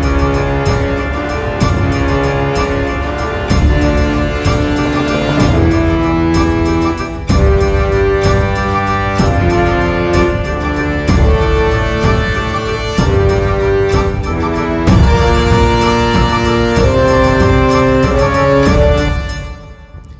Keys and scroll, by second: 5.8 super+a, 18.9 space.